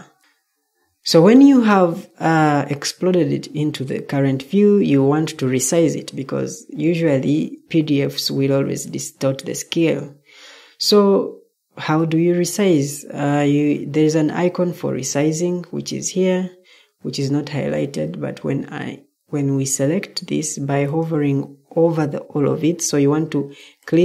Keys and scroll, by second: 0.2 Escape, 22.8 Escape.